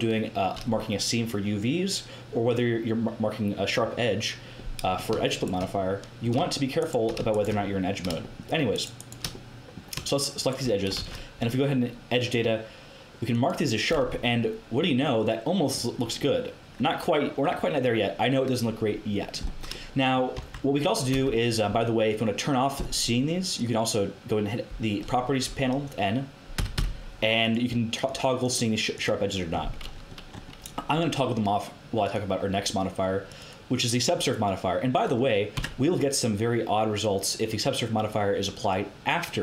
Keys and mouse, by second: 5.3-8.2 middle drag, 10.9 ctrl+e, 14.1 Tab, 20.3 Tab, 21.1 n, 26.5 n, 26.7 n, 27.3-30.8 drag, 30.8-32.0 middle drag, 32.0-33.1 drag, 35.5 Tab.